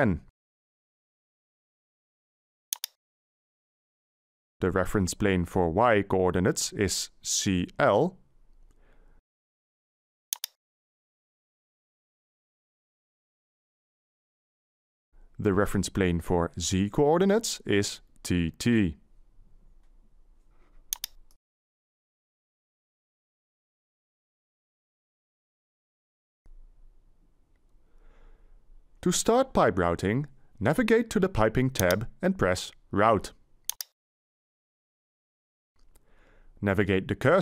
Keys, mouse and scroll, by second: 0.1 1, 0.5 0, 5.3 y, 6.3 Delete, 7.6 c, 8.1 l, 16.7 z, 17.6 Delete, 19.0 t, 19.4 t.